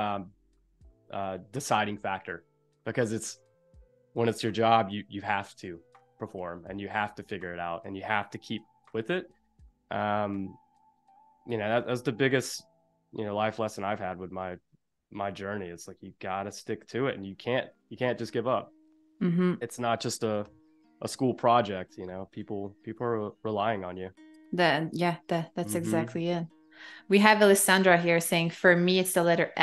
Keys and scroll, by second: 19.4 a, 20.6 i, 22.0 a, 24.3 space, 27.7 i, 29.4 a.